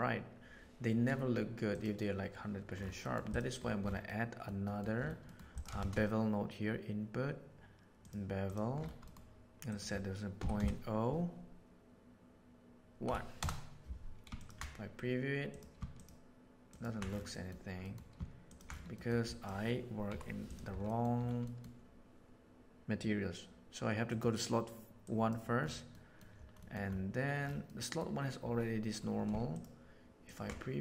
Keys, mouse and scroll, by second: 3.0 middle click, 4.1 middle click, 4.6 middle click, 5.2 middle click, 5.5 click, 5.7 shift+a, 9.0 middle click, 9.6-13.8 middle drag, 14.3 ctrl+shift+right click, 15.9 ctrl+shift+right click, 16.6 ctrl+shift+right click, 17.3 middle click, 17.8 middle click, 18.4 ctrl+shift+click, 18.9 middle click, 19.3 click, 20.0 Delete, 20.4 right click, 20.8 middle click, 21.4 middle click, 24.1-24.8 drag, 25.8 middle click, 26.6 middle click, 27.6 middle click, 30.2 ctrl+shift+click.